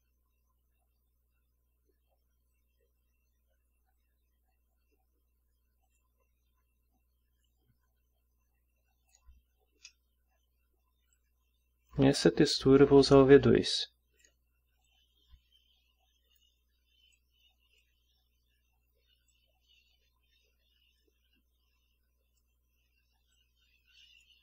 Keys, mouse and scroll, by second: 5.8 click, 7.4-9.3 drag, 9.7-11.1 scroll up 2, 9.9 middle click, 11.1-12.1 drag, 13.7-14.4 drag, 14.9-16.5 drag, 17.1-18.0 drag, 19.3-22.6 drag, 23.3-24.4 drag.